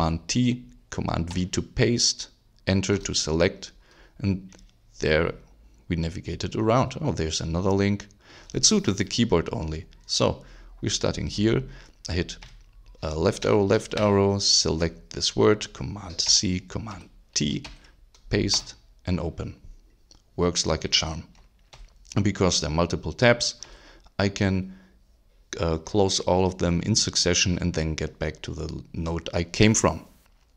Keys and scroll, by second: 1.3 super+v, 2.9 Return, 12.4 Left, 13.7 alt+shift+Left, 16.2 super+c, 16.9 super+t, 17.6 super+v, 18.5 super+Return, 21.7 super+w, 23.6 super+w.